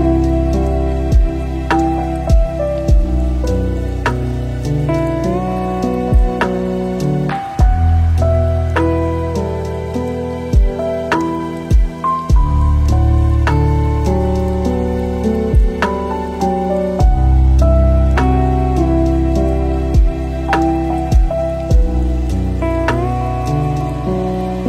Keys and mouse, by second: 2.4-2.9 drag, 3.9 shift+middle click, 5.8 click, 9.0 middle click, 10.6 shift+d, 12.8 ctrl+shift+click, 13.6 click, 14.3-15.3 drag, 15.6 ctrl+shift+click, 18.7 click, 20.9 middle click, 21.4 middle click, 22.7 click, 23.6 shift+d.